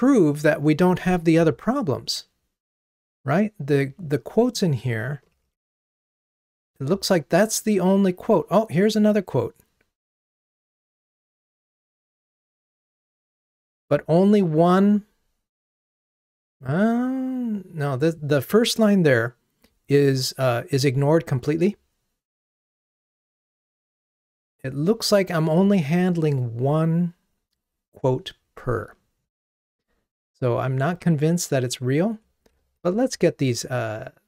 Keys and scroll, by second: 5.5 super+f, 29.6 ctrl+Tab, 33.0 super+k.